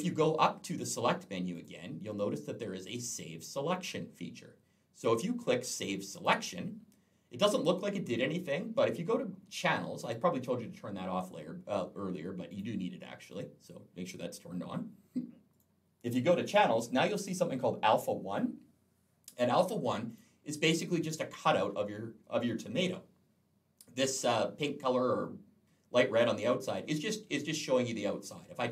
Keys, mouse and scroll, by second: 1.4 click, 6.0 click, 12.3 click, 15.3 click, 19.9 click.